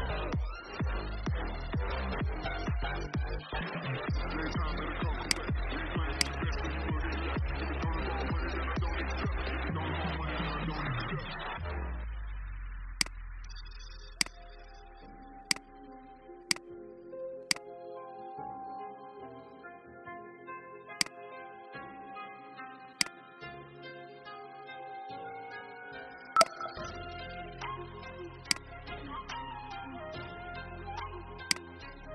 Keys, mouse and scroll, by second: 19.6 i, 20.9 click, 22.4 v, 22.8 click, 23.8 ctrl+x, 24.7 ctrl+b, 26.3 click.